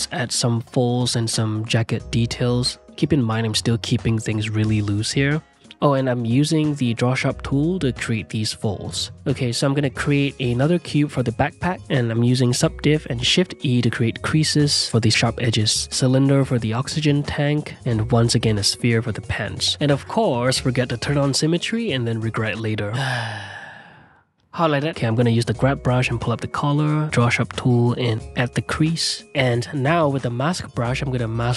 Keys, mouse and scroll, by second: 0.4 ctrl+click, 1.2 ctrl+z, 1.6 ctrl+click, 1.8 ctrl+middle click, 1.9 click, 2.2 ctrl+z, 2.7 middle click, 2.9-4.0 ctrl+drag, 4.0 middle click, 4.1 ctrl+click, 4.5 f, 4.7 ctrl+click, 5.4 ctrl+z, 5.5 ctrl+click, 6.2 ctrl+z, 6.5 f, 6.6 ctrl+click, 7.0 middle click, 7.0 ctrl+click, 7.9 f, 8.2 ctrl+click, 8.3 ctrl+z, 8.4 ctrl+click, 8.8 2, 9.1 ctrl+click, 10.6 click, 10.9 s, 11.5 r, 11.8 g, 12.1 s, 13.0 middle click, 13.2 ctrl+2, 13.4 middle drag, 13.7 shift+e, 14.1 Tab, 14.3 click, 14.8-18.6 typing, 15.5 click, 18.9 click, 19.7 middle click, 19.9 click, 20.3 q, 20.9-22.0 ctrl+middle drag, 22.0 click, 22.5 middle click, 22.5 shift+r, 23.2 ctrl+r, 23.8 f, 24.2 click, 25.8 shift+middle click, 25.9 click, 26.8 middle click, 27.0 click, 28.5 ctrl+z, 28.6 click, 29.3 f, 29.5 click, 30.0 middle click, 30.4 click, 30.6 middle click, 31.0 click, 31.3 middle click.